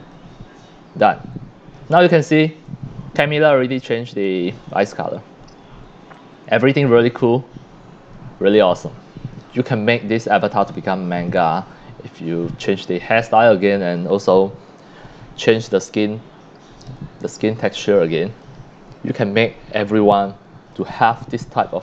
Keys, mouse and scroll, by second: 0.0 click, 1.1-3.4 drag, 1.5 scroll up 2, 2.6 c, 4.2-4.7 drag, 4.2 c, 4.9 scroll up 1, 5.6 scroll down 5, 6.1 x, 6.1-7.4 drag, 6.9 c, 7.7 scroll up 2, 8.5 x, 8.5-9.9 drag, 9.0 c, 10.4 x, 10.5-11.3 drag, 15.4 c, 15.5-17.0 drag, 17.2-18.4 drag, 17.2 x, 17.8 c, 18.9 scroll down 1, 19.9 c, 20.1-20.7 drag, 20.9 click, 21.1 click, 21.1-21.7 scroll up 2.